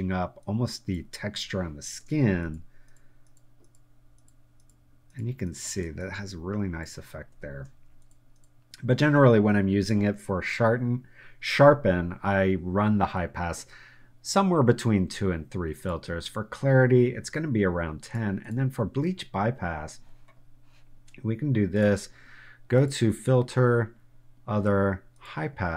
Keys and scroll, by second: 1.6 super+space, 5.7 space.